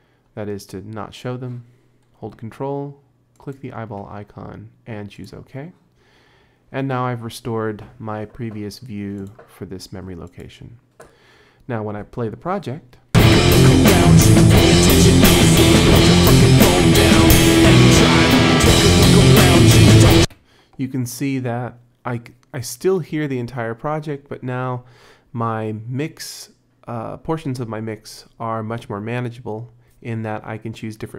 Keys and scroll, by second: 12.8 space, 20.2 space.